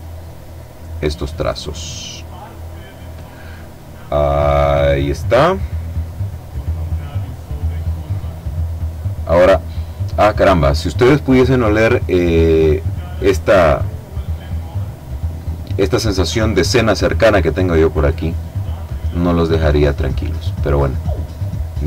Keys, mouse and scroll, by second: 1.0-2.8 drag, 3.3-4.0 scroll down 1, 4.0-5.2 scroll up 1, 5.2-5.8 scroll down 1, 5.8-7.1 scroll up 1, 7.8-9.8 drag, 16.5 click, 19.9 click, 21.3 click.